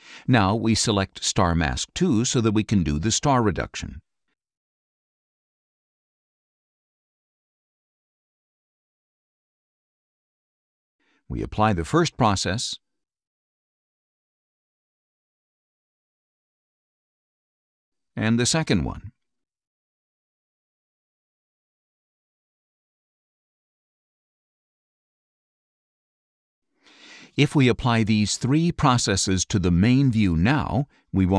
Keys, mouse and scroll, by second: 1.6 click, 3.0 click, 4.6 click, 5.7 click, 7.9 click, 8.9 click, 11.2 click, 13.4 click, 15.9 click, 18.1 click, 20.3 click, 23.6 click, 25.6 click, 27.3 right click, 29.0 click.